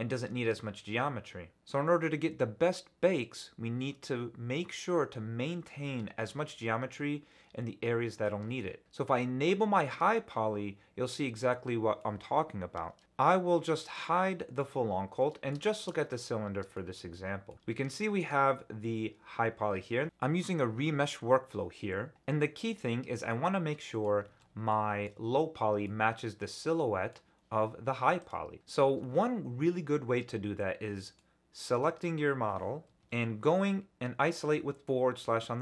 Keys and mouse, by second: 8.6 middle click, 11.0-12.0 drag, 12.0 middle click, 12.1 click, 12.1 right click, 12.9 middle click, 13.9 click, 14.6-15.5 middle drag, 15.7 shift+middle click, 16.7 shift+drag, 17.5 click, 17.5 ctrl+alt+z, 18.0 shift+drag, 19.8 ctrl+alt+z, 23.3-24.0 middle drag, 24.4 ctrl+alt+z, 24.7 middle click, 25.8-27.1 middle drag, 26.5-27.1 drag, 26.5-27.1 right drag, 28.2 click, 28.6-31.2 middle drag.